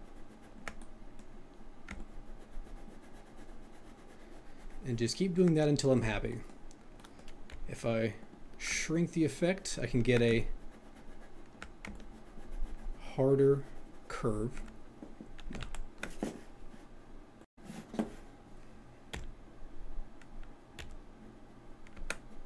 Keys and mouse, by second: 1.9 ctrl+click, 7.4 f, 8.3 click, 8.9-10.1 ctrl+drag, 10.3 ctrl+click, 11.9-14.6 ctrl+drag.